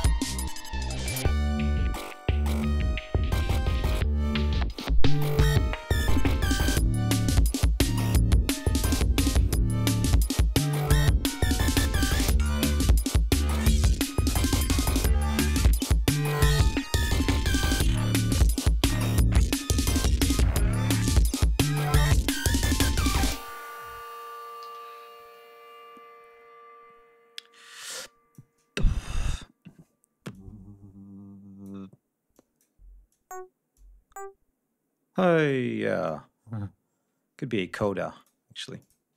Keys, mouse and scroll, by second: 1.8 ctrl+scroll down 2, 4.7-6.4 drag, 6.7-7.2 scroll down 5, 7.8 ctrl+scroll up 2, 8.7-9.1 scroll down 2, 11.4 ctrl+scroll down 2, 11.6 ctrl+scroll up 2, 13.1 scroll down 2, 13.6 scroll down 2, 14.4 scroll down 2, 17.4 g, 18.5 scroll up 2, 19.4 scroll down 2, 20.0-21.2 scroll down 7, 21.4 ctrl+scroll up 2, 24.1 space, 24.6 d, 25.7 scroll down 2, 27.6 click, 29.2 ctrl+scroll up 2, 30.3-31.8 drag, 32.3 click, 33.0 click, 33.7-35.6 drag, 36.0-38.4 drag, 38.7 click.